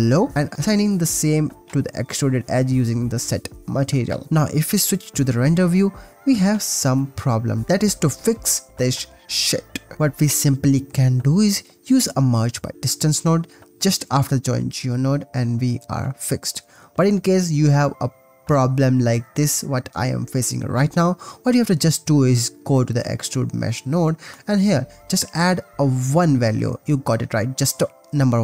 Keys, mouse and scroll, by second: 0.8 click, 3.4 click, 4.8 click, 5.4 ctrl+s, 6.4 shift+drag, 8.1 click, 8.9 ctrl+s, 10.4 click, 10.9 click, 11.4 shift+a, 15.6 ctrl+s, 16.8 shift+middle click, 17.4-17.8 shift+middle drag, 17.9-18.3 shift+middle drag, 18.3 shift+click, 18.6 shift+middle click, 22.6 click, 23.1 click, 23.9-26.6 drag, 28.1 click.